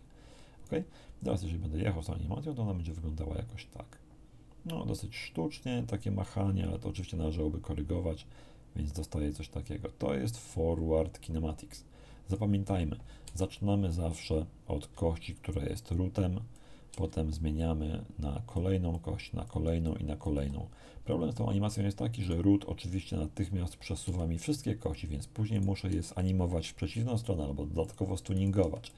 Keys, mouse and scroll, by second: 1.2-12.5 drag, 13.2 a, 14.9 d, 15.3-16.7 drag, 17.6-18.7 drag, 18.9 click, 19.8 click, 22.2 right click, 24.0 r, 24.8 click, 25.5 right click, 25.8 r, 27.8 click, 28.3 right click, 28.6 r, 28.8 click.